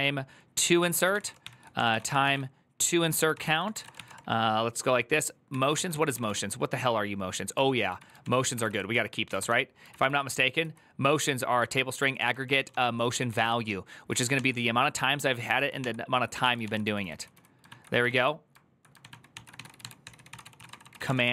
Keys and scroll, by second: 0.0-4.2 typing, 0.3 Tab, 0.6 ctrl+c, 2.9 Tab, 3.1 ctrl+c, 3.2 ctrl+c, 5.3 Tab, 5.4-6.5 typing, 7.4 ctrl+w, 7.8 k, 8.0 ctrl+w, 8.2 ctrl+o, 8.3 ctrl+c, 8.8-9.7 typing, 10.4 ctrl+j, 11.5-17.1 typing, 16.4 ctrl+c, 17.4 ctrl+o, 17.8 ctrl+o, 18.8 ctrl+w, 18.9 ctrl+o, 19.1-21.3 typing.